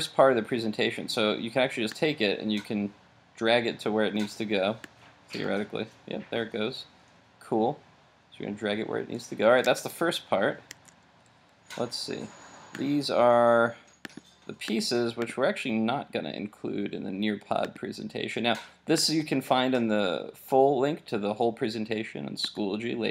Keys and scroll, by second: 9.6 super+Tab.